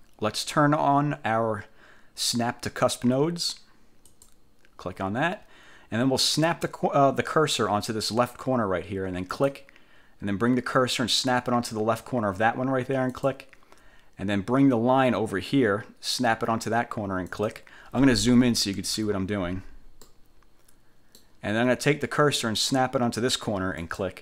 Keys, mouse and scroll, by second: 4.2 click, 9.4 click, 13.2 click, 17.4 click, 18.5 =, 20.2 middle click, 20.4 click, 20.7 middle click, 23.9 click.